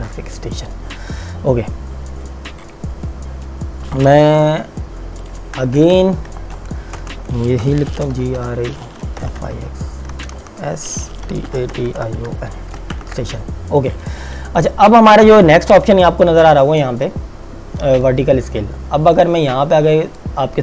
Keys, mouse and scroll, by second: 4.4 t, 5.3 click, 7.0 Return, 7.7-12.8 typing, 13.0 KP_Enter, 13.8 click, 19.1 click.